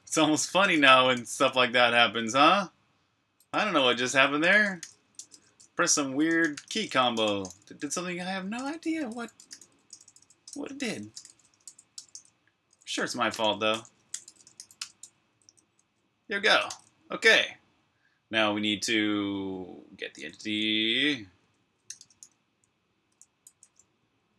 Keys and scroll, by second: 0.2-1.5 typing, 3.5-10.6 typing, 16.4 o, 18.5 typing, 19.9 Escape, 20.1 typing, 21.4-23.4 typing.